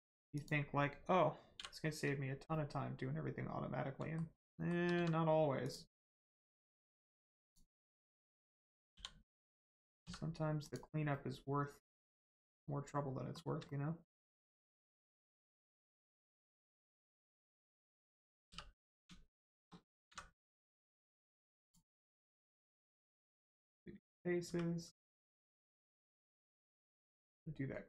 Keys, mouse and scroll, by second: 0.3 click, 2.5 middle click, 3.9 shift+middle click, 4.9 shift+x, 5.6 click, 6.1 middle click, 7.4 click, 10.0 x, 10.6 click, 11.1 middle click, 12.3 shift+middle click, 13.6 middle click, 13.7 middle click, 14.7 shift+middle click, 15.9 middle click, 15.9 middle click, 16.3 shift+middle click, 16.6 scroll up 1, 17.3 click, 17.7 shift+middle click, 17.9 scroll up 1, 18.9 click, 19.3 shift+click, 21.6 click, 21.9 middle click, 22.3 Tab, 22.9 middle click, 23.3 Tab, 24.4 1, 24.9 middle click, 25.5 shift+middle click, 25.9 middle click, 26.0 middle click.